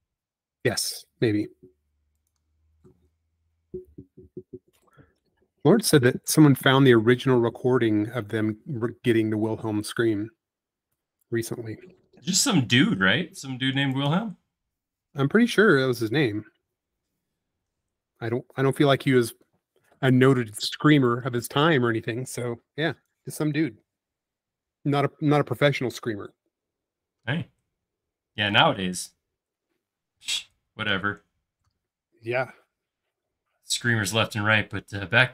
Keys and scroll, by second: 14.6 space, 20.0 shift+q, 23.5 shift+q.